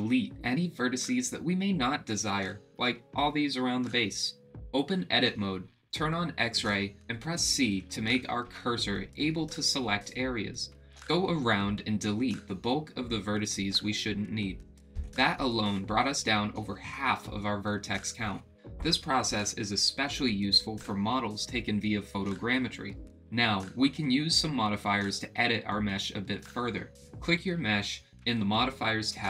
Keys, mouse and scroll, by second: 1.0 middle click, 7.6 click, 8.9 KP_7, 9.4 c, 14.8 middle click, 16.6 middle click, 29.1 click.